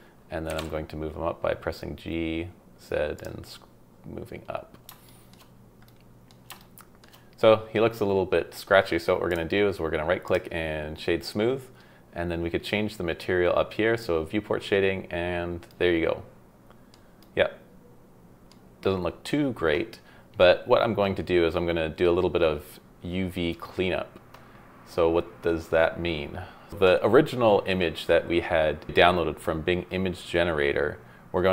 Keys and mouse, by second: 0.5 g, 0.6 z, 3.1-3.6 drag, 5.0 shift+middle drag, 5.8-6.3 middle drag, 6.6-7.0 shift+middle drag, 9.4 middle click, 14.1 click, 15.7-16.9 middle drag, 17.2-18.5 middle drag.